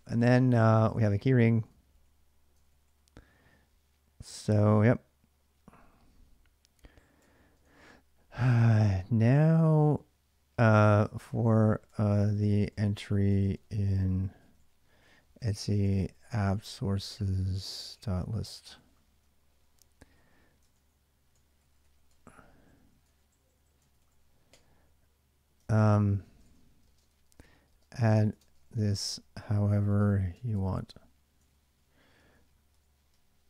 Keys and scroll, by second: 0.0-0.2 typing, 0.5 ctrl+a, 0.7 ctrl+a, 1.3 ctrl+a, 2.2-3.0 typing, 6.7-8.0 typing, 10.2-24.3 typing, 22.8 Return, 25.4 ctrl+[, 25.4-33.4 typing.